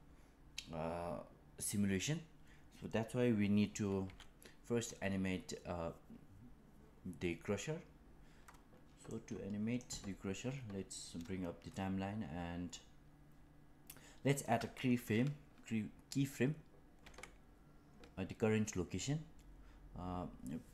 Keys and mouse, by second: 4.0 KP_1, 9.0-12.7 drag.